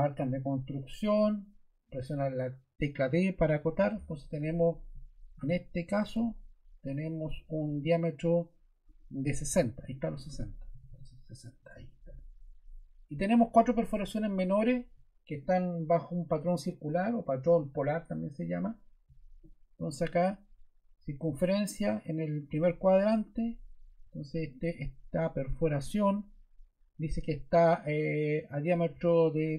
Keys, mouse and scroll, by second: 3.5 d, 6.0 d, 10.4-11.4 typing, 11.6 Return.